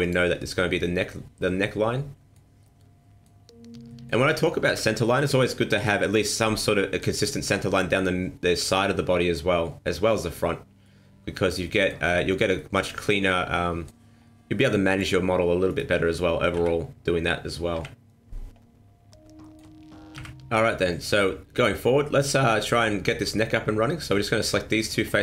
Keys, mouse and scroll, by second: 0.4 middle click, 0.5 n, 2.6 middle click, 3.9 middle click, 4.7 KP_1, 5.8 KP_3, 6.7 shift+middle click, 10.8 middle click, 12.2 shift+middle click, 12.6 middle click, 13.8 m, 14.9 click, 16.6 right click, 16.6 KP_1, 17.8 KP_3, 19.2 KP_1, 19.4 middle click, 20.1 KP_1, 24.1 right click, 24.8 shift+right click, 25.1 middle click.